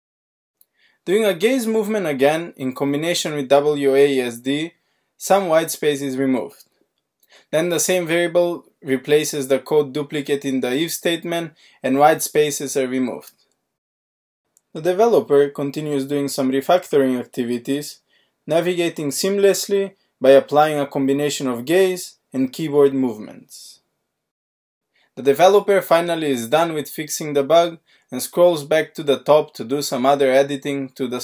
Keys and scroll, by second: 2.3 alt+r, 3.5 alt+d, 4.0 alt+d, 4.6 alt+d, 10.4 alt+q, 11.2 alt+d, 12.5 alt+shift+r, 16.6 alt+r, 17.4 alt+shift+d, 20.3 alt+q, 22.0 alt+d, 29.6 alt+z.